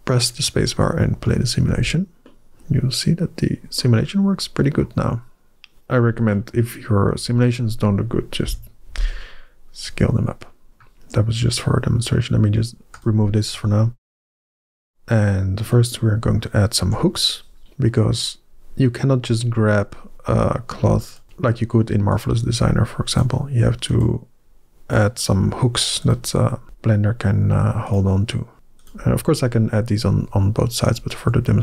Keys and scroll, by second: 1.6 alt+a, 8.3 KP_1, 16.7 Tab.